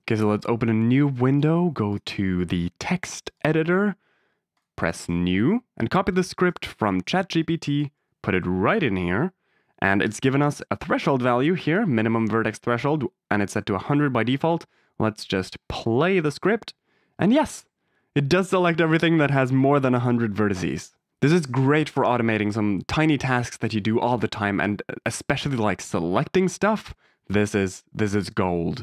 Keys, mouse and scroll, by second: 1.8-3.4 drag, 4.5 click, 7.6 click, 8.3 ctrl+v, 10.0 BackSpace, 10.6-12.0 drag, 14.3 click, 16.2 click, 25.7 click.